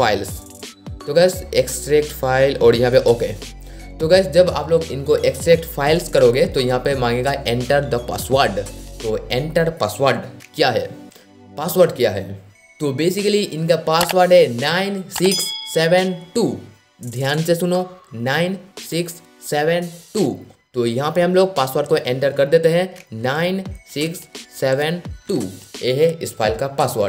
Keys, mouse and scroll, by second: 0.0 click, 23.3 KP_9, 24.0 KP_6, 24.7 KP_7, 25.3 KP_2.